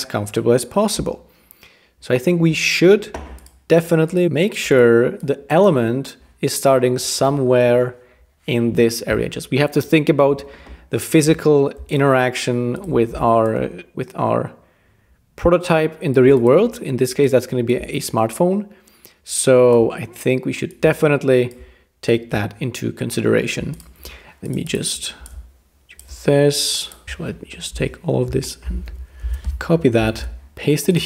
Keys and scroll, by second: 27.0 BackSpace, 27.7 Return, 28.9 super+g, 29.2 super+c, 30.1 super+v.